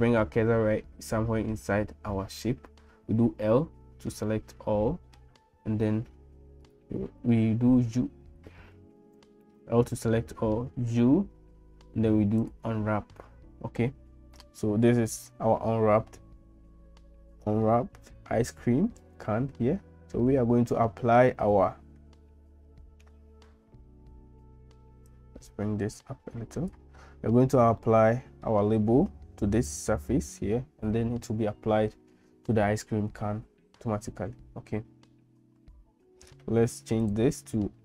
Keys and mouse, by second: 3.4 l, 4.4 middle click, 6.6-7.9 drag, 9.1 ctrl+z, 10.5 u, 25.1-26.8 drag, 27.8 middle click, 37.0-37.8 drag.